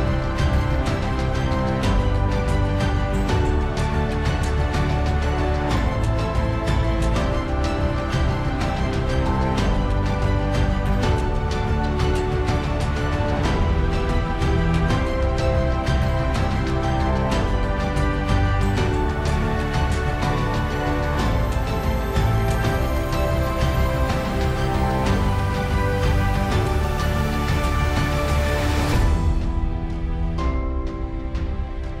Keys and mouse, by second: 6.9 alt+middle click, 19.9 middle click, 21.7 Delete, 26.4 alt+middle click, 27.3 alt+middle click.